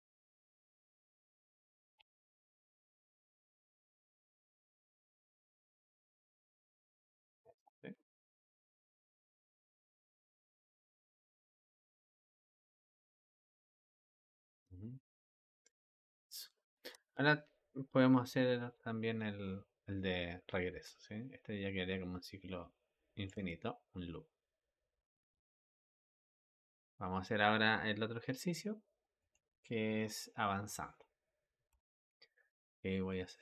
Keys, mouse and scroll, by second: 0.0-0.5 shift+middle drag, 0.5 click, 1.8 space, 4.8 click, 16.7 Escape, 18.1-21.1 drag, 23.2 space, 26.5 Escape, 29.0 click, 31.6 a, 33.3 a.